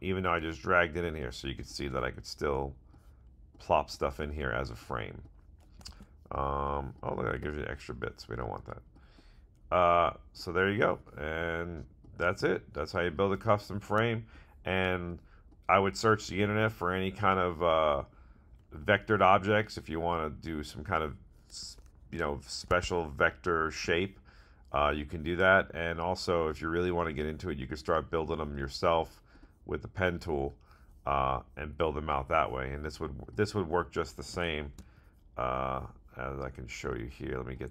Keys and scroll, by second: 5.8 super+z, 22.6 super+Tab.